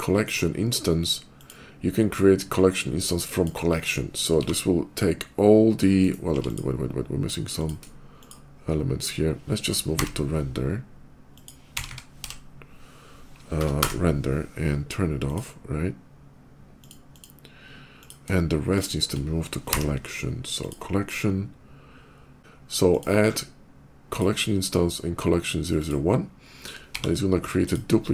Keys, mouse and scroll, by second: 1.2 click, 3.2 click, 4.3 g, 5.8 click, 6.1 x, 6.2 click, 7.4 click, 8.0 shift+click, 8.7 shift+click, 9.7 m, 11.2 click, 11.6 r, 11.7 e, 12.1 m, 12.1 n, 13.4 Return, 13.4 BackSpace, 13.8 n, 14.9 Return, 15.1 click, 16.6 click, 16.9 click, 17.8 click, 18.6 shift+click, 19.5 m, 20.4 click, 22.5 click, 23.7 click, 25.5 click, 26.8 g, 27.5 click, 28.0 click.